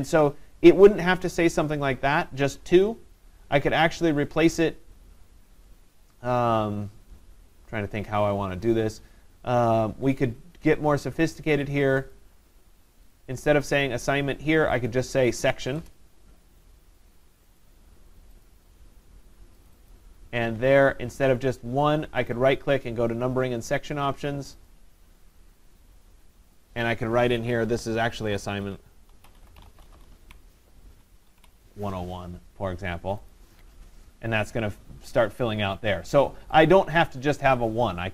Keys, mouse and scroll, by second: 11.9 click, 12.1 click, 15.3 click, 15.8 BackSpace, 17.6 click, 18.5 click, 19.7 click, 19.9 click, 22.3 right click, 24.7 click, 26.8 click, 28.0-31.8 typing, 33.3 click, 36.7 click.